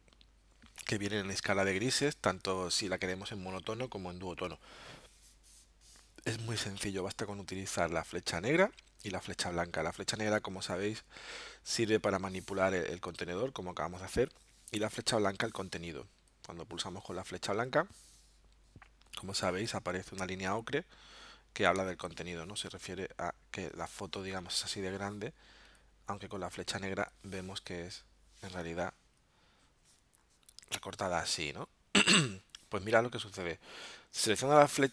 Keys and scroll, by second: 21.9 alt+super+-, 28.7 v.